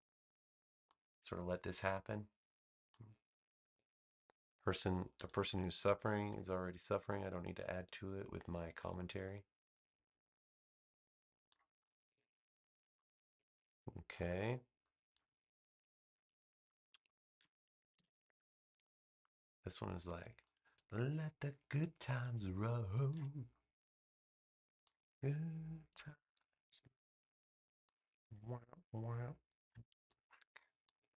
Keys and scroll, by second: 6.2 v, 13.1 space, 17.9 super+v, 25.8 a.